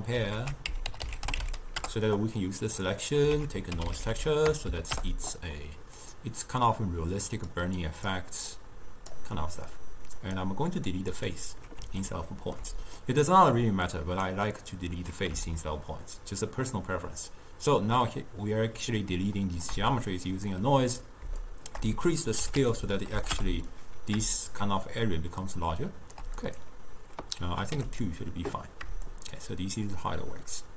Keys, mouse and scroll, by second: 7.6-12.1 drag, 12.1-15.6 ctrl+middle drag, 15.6-18.6 shift+drag, 23.4-30.7 shift+drag.